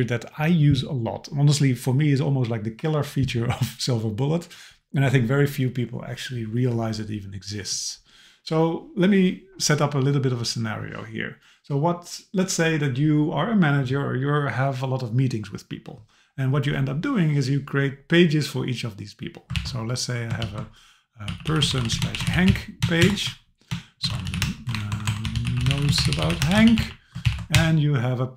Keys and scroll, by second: 19.6 super+k, 23.0 shift+Return, 24.7 BackSpace, 27.3 super+k.